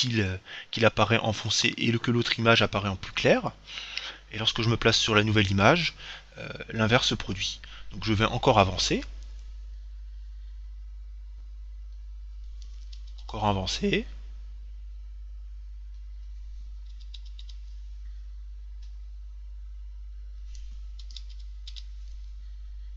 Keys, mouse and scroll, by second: 3.4 Right, 7.1 Right, 8.9 Right, 10.0 Right, 13.2 Right, 17.1 Right, 17.6 Right, 21.3 Right.